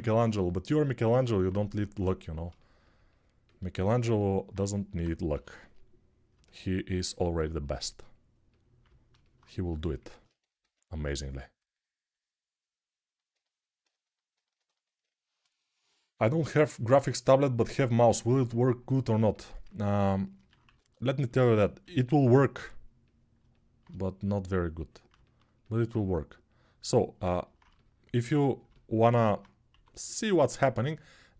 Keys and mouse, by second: 5.1 g, 10.4 x, 20.4 1, 21.6 g, 25.0-29.8 alt+shift+drag, 29.5 1.